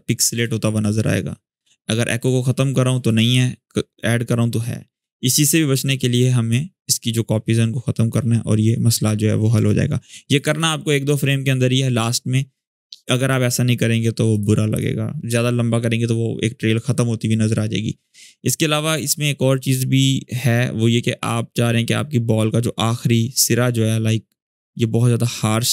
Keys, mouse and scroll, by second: 1.9 click, 5.7-6.4 drag, 10.2 space, 12.3-12.9 click, 13.1-14.0 scroll down 1, 14.0 click, 18.9-24.6 drag.